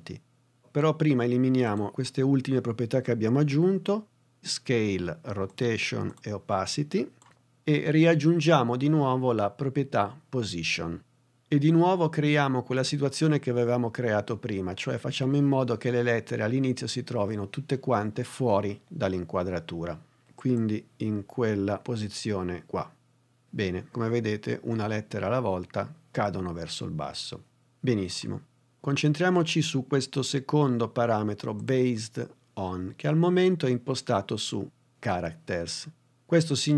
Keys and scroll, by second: 7.2 BackSpace.